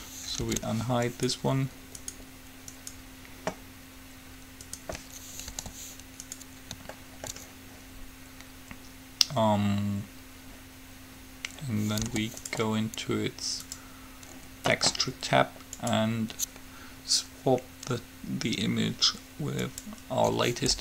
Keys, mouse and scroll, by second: 0.7 alt+h, 3.5-4.7 right drag, 5.6 g, 7.2-9.2 middle drag, 12.2 g, 13.8-15.6 drag, 16.0-17.7 drag.